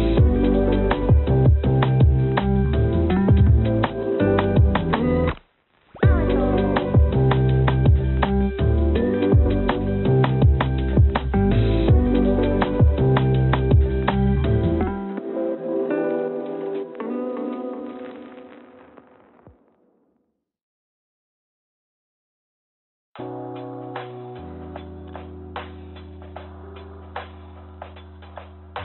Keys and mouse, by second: 2.9 n, 3.8 click, 5.5 g, 7.5 g, 8.1 z, 10.0 g, 14.6-17.0 drag, 15.5 BackSpace, 15.6 BackSpace, 16.5 0, 19.2 click, 21.3-22.6 drag, 22.9 click, 23.4-26.1 drag, 25.8 0, 27.1 click.